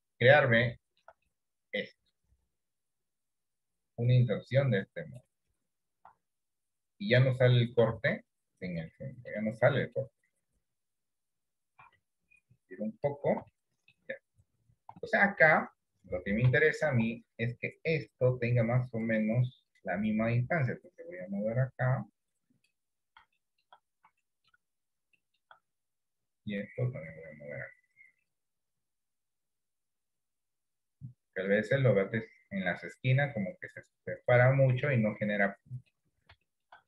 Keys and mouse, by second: 0.9 shift+middle click, 1.4-5.2 middle drag, 6.1 s, 8.1 ctrl+z, 9.0 middle click, 9.9 middle click, 10.6 KP_7, 11.8 s, 13.8 shift+middle click, 15.3 shift+middle click, 16.7 shift+middle click, 18.3 click, 20.5-22.8 drag, 23.5 shift+middle click, 24.3 shift+middle click, 25.4 shift+middle click, 27.1-28.3 drag, 29.8 click, 32.2 click, 34.4 click, 35.7 middle click, 36.6 shift+middle click.